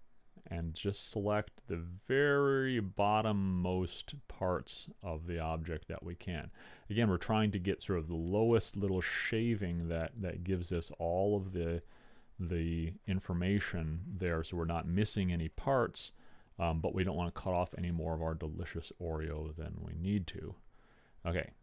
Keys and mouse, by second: 18.0-19.8 middle drag.